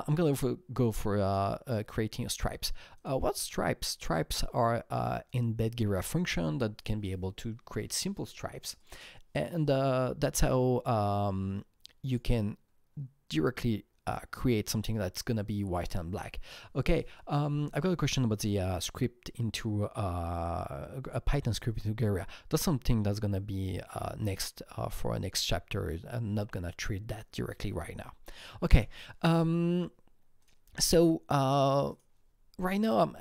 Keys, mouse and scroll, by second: 1.2 click, 2.9 click, 5.2 click, 8.8 click, 12.0 click, 14.0 click, 30.3 click, 31.8 click, 31.9 click.